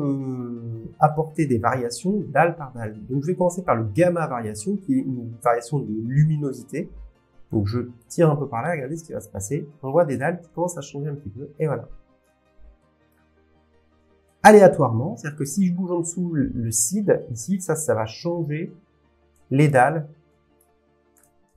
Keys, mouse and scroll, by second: 8.0 click, 10.7 click, 13.3 middle click, 14.5 scroll, 18.4 click, 19.7 click.